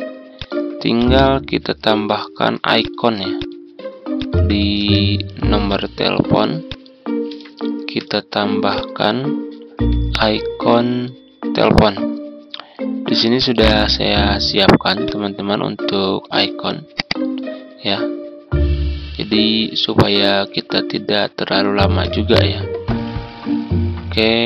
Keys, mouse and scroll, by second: 0.9-2.4 drag, 2.7 click, 4.1 shift+click, 4.7 shift+b, 5.6 click, 6.6 shift+click, 8.6 click, 9.6 z, 10.1 click, 19.0 Tab, 22.0 click, 22.7-23.1 ctrl+scroll down 2.